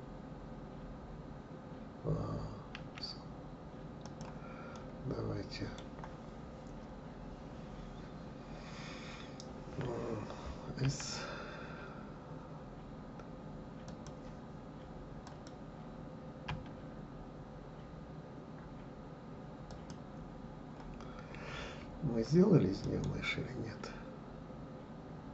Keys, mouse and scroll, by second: 4.7-7.7 middle drag, 15.2 click, 16.4 s, 22.8-25.3 right drag.